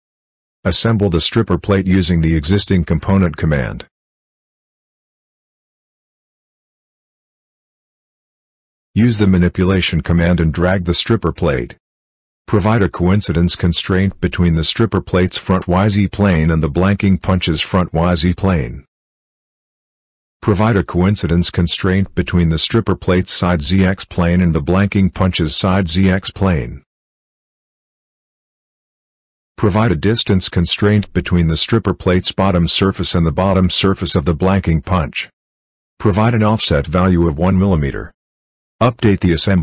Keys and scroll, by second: 35.1 1.